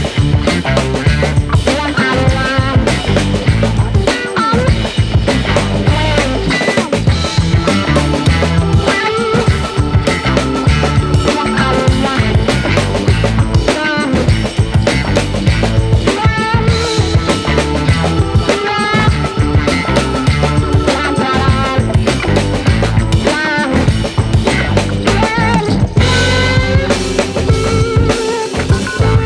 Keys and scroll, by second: 3.7 Up, 3.8 Up, 4.0 Up, 4.1 Up, 4.8 Right, 8.8 Down, 8.9 Down, 9.0 Down, 10.3 alt+BackSpace, 11.4 space, 22.8 ctrl+space, 27.2 ctrl+space.